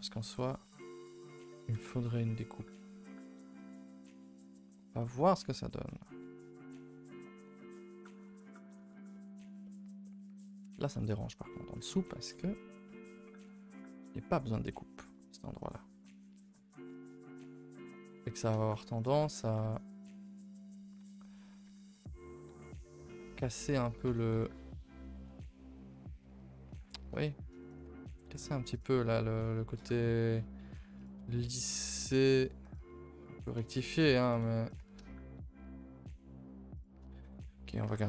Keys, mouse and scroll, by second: 0.4 Escape, 0.7 a, 0.8 a, 1.7 ctrl+r, 4.8 a, 4.9 a, 5.5 k, 8.2 middle click, 8.4 a, 8.5 a, 8.7-10.6 middle drag, 10.6 scroll down 1, 10.9 middle click, 11.3 scroll, 11.6 middle click, 11.8 Tab, 12.2 Tab, 12.3 middle click, 12.6 scroll up 2, 12.9 middle click, 13.7 KP_0.